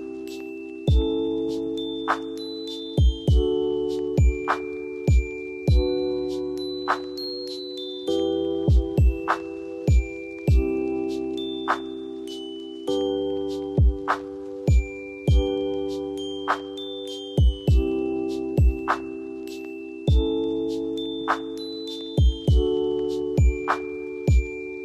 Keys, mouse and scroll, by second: 5.0 ctrl+j, 10.6 alt+scroll, 11.6-13.3 alt+scroll, 15.6 alt+scroll up 9, 22.2-22.9 alt+scroll up 3, 22.9-23.5 alt+scroll up 1, 23.5 alt+scroll up 3, 23.5-24.0 alt+scroll down 12, 24.4-24.8 alt+scroll up 1.